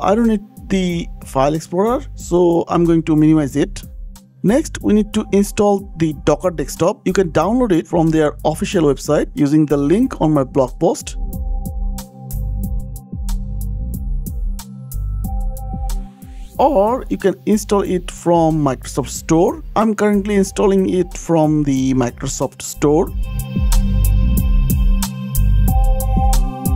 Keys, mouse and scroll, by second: 3.8 click, 3.9-4.3 scroll down 12, 4.3-4.9 scroll up 5, 5.1-5.5 scroll down 2, 10.3 click, 10.8 click, 11.4 scroll down 3, 16.3 click, 18.3 super+m, 18.4-19.3 typing, 20.3 click, 20.4 click, 20.4-21.7 typing, 20.5 click, 21.9 Up, 22.0 Up, 22.0 Return, 22.8 click, 23.7 click, 25.6 click, 26.5 shift+click.